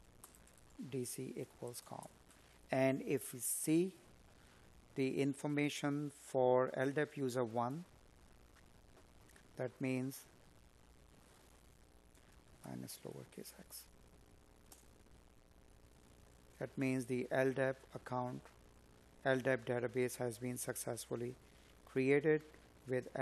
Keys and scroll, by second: 2.0 space.